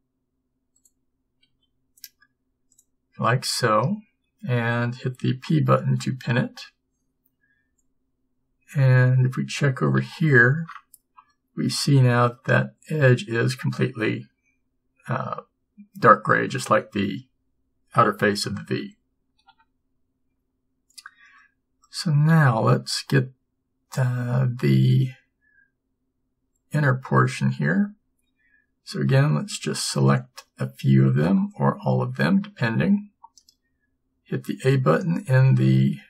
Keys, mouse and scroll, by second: 1.6 g, 6.4 p, 8.4 a, 8.8 a, 9.3 a, 10.1 Tab, 18.8 Tab, 19.6 a, 22.4 a, 27.7 a, 30.0 b, 32.3 b.